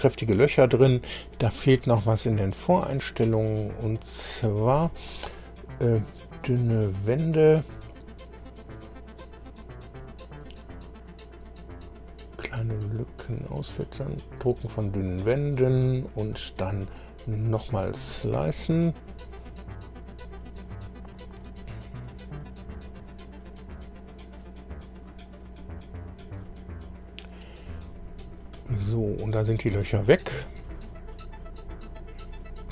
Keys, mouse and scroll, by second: 6.0-9.3 drag, 15.1 click, 17.4 click, 27.9-28.4 scroll up 1, 28.5-32.7 middle drag.